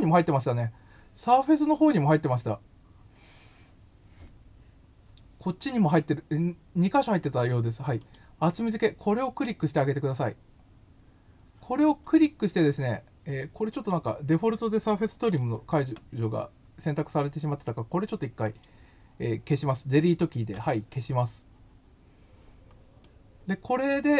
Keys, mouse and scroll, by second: 8.0 click, 13.7 click, 23.0-24.1 middle drag.